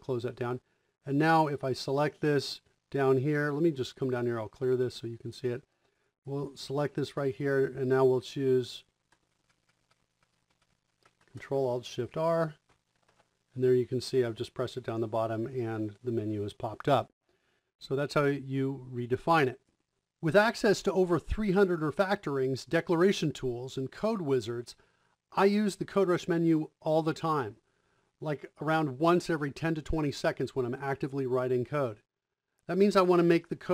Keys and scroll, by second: 8.9 Left, 9.4 ctrl+shift+Right, 9.6 ctrl+shift+Right, 10.4 Right, 10.9 Right, 13.0 ctrl+alt+shift+r.